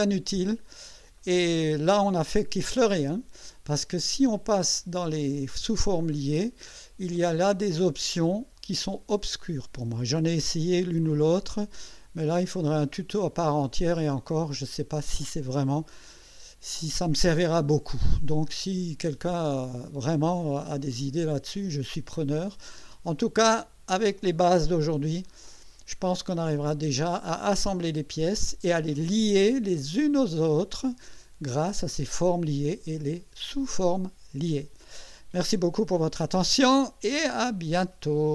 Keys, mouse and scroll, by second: 1.2 right click, 2.4 click, 5.7 click, 7.9 click, 12.9 click, 14.3-18.4 drag, 19.8-22.2 drag, 25.2 right click, 26.2-27.4 drag.